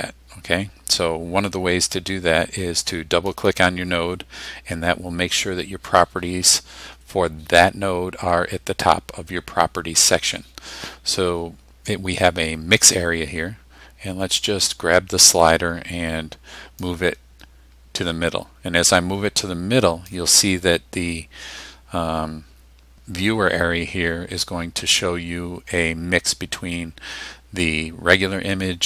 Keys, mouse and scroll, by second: 3.3 click, 16.9-20.2 drag.